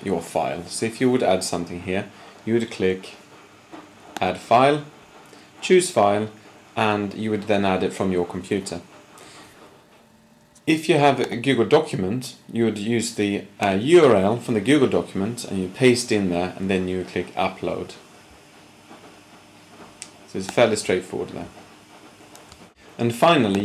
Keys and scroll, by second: 22.6 shift+super+p.